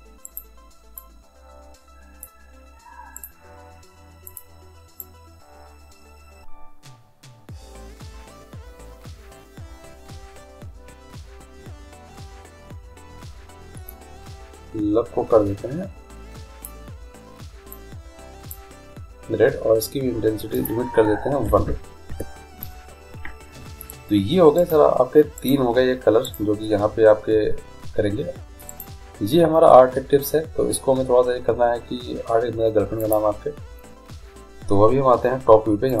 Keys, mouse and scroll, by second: 0.5-2.2 right drag, 1.2-3.0 drag, 3.3-5.3 right drag, 4.5-6.4 drag, 20.7-22.7 drag, 24.8-28.3 right drag, 28.9-30.6 right drag, 33.2-34.9 drag.